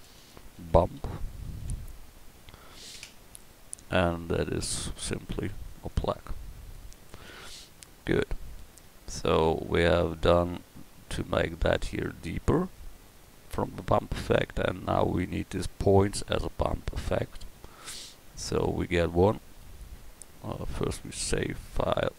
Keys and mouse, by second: 8.1 a.